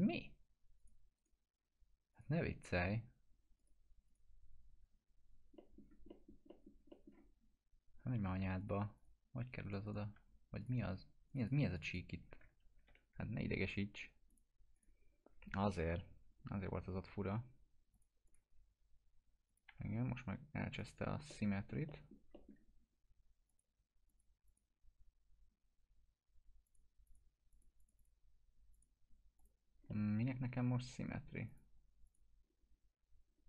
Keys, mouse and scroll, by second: 0.8 click, 1.2 right click, 2.1 click, 5.6 middle click, 5.8 scroll down 1, 6.1 middle click, 7.5 scroll up 1, 8.6 click, 9.6 right click, 10.2 2, 10.6 click, 10.8 2, 11.3 click, 12.8 ctrl+BackSpace, 14.3 click, 15.3 scroll down 1, 15.7 F4, 16.4 scroll down 1, 17.9 click, 19.7 F4, 20.8 click, 21.3-22.2 alt+middle click, 23.5 click, 29.9-30.5 alt+middle drag, 31.5 click, 32.7-33.1 scroll up 1.